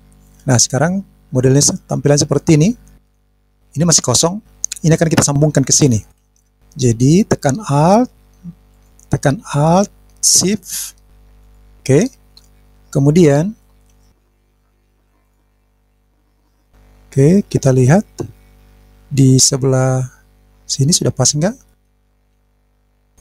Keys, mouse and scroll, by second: 2.3 click, 3.4 scroll down 2, 3.4 scroll up 1, 3.5 scroll down 1, 4.2-5.0 scroll up 1, 8.4 alt+click, 11.2 alt+shift+click, 14.3 click, 14.8 click, 16.0-16.5 scroll down 2, 16.5 click, 17.1-17.4 scroll down 2, 17.4 scroll up 1, 17.4-18.3 scroll down 1, 19.7-20.7 drag, 21.7 middle click, 22.8 middle click.